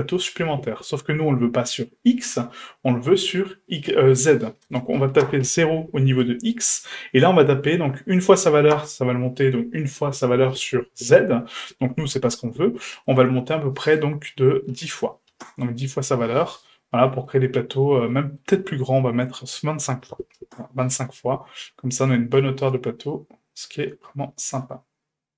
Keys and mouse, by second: 3.7-5.4 drag, 6.6-8.7 drag, 13.2-15.7 drag, 16.4-17.3 middle drag, 18.1 shift+middle click, 19.3-20.8 drag, 21.6-22.1 middle drag, 22.3-22.6 shift+middle drag, 22.8-25.3 middle drag.